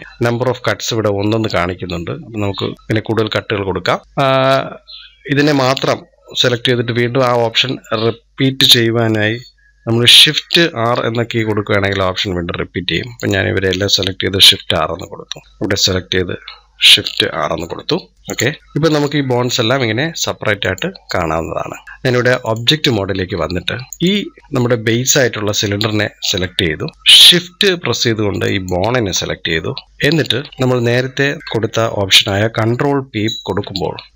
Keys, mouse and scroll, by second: 2.7-4.0 drag, 10.7 shift+r, 13.0-14.3 drag, 14.3 shift+r, 15.4 click, 17.1 shift+r, 18.1 click, 18.6 scroll down 4, 20.4 click, 21.8-23.2 drag, 23.2 scroll up 1, 23.9 click, 26.2-26.9 shift+middle drag, 26.9 scroll up 4, 27.1-28.3 shift+middle drag, 28.3-29.2 shift+drag, 29.3 scroll down 2, 29.8-33.4 middle drag, 33.4 ctrl+p.